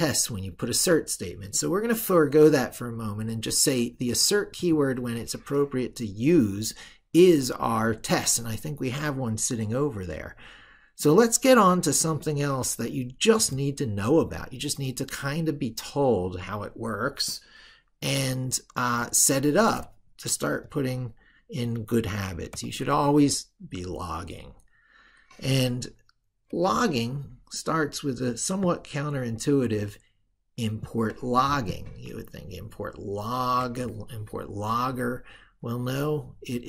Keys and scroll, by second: 32.1 ctrl+super+Right.